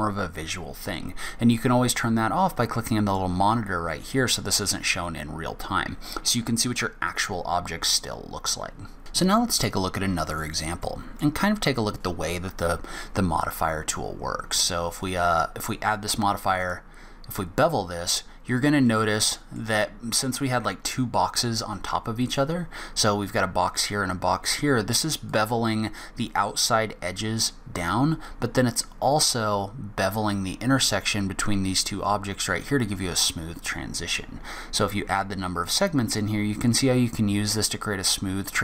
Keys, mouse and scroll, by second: 3.1 click, 7.0 click, 9.0 Tab, 9.0-9.4 scroll down 8, 9.4 scroll up 4, 10.3 click, 10.8 middle click, 13.5 scroll up 1, 14.0 scroll down 1, 15.0 click, 17.7 scroll up 1, 18.5 scroll down 1, 18.8 middle click, 22.2 click, 25.3 click, 34.3 click.